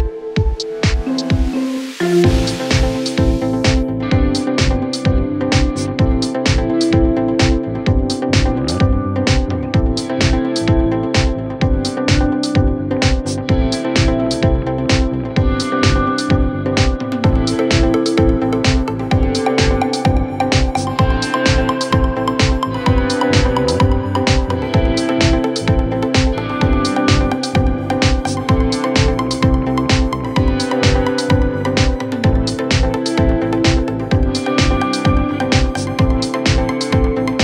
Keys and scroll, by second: 0.4 ctrl+z, 11.5 ctrl+s, 14.7 c, 16.2 F3, 16.2 Escape, 31.3 e, 33.8 c, 35.3 F3, 35.7 Escape.